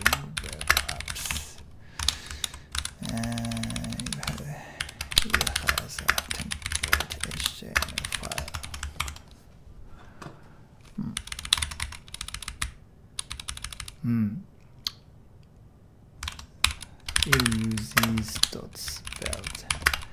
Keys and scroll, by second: 0.0-8.8 typing, 2.8 super+h, 4.3 super+Tab, 9.0 super+Tab, 11.2-13.8 typing, 11.8 ctrl+d, 16.4-20.0 typing.